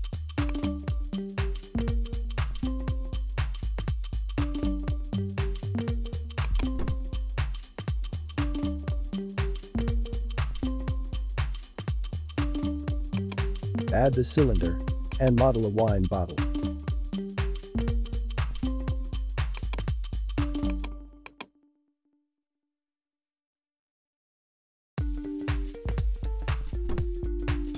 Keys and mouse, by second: 0.4 click, 4.3 click, 6.4-8.8 drag, 10.8 a, 12.2 h, 13.2-15.6 drag, 16.6-18.9 drag, 19.5 click, 20.7 click, 21.3-23.0 drag, 23.0 s.